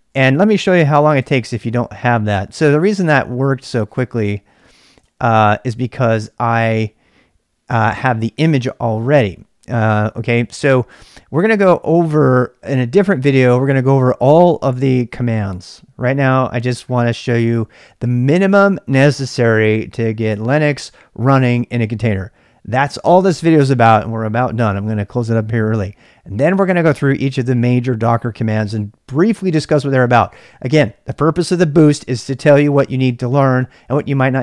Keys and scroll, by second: 1.2 ctrl+c, 1.6 ctrl+[, 1.7-2.2 typing, 2.7 ctrl+c, 4.4-5.4 typing.